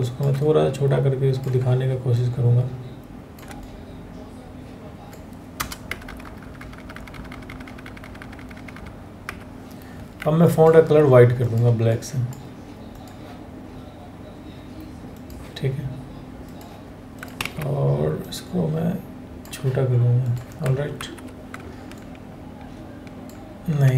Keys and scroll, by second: 5.1 Return, 5.6 Return, 6.0 Return, 6.2 Return, 6.5 Return, 6.7 Return, 7.1 Return, 7.2 Down, 7.4 Down, 7.6 Down, 7.8 Down, 8.0 Down, 8.3 Down, 17.0 ctrl+a, 20.6 ctrl+t.